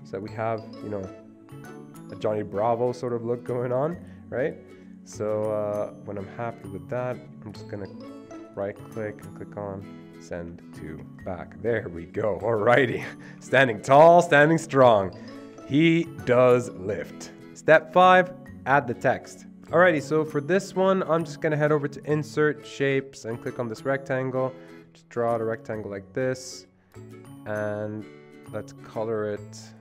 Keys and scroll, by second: 19.6 ctrl+z.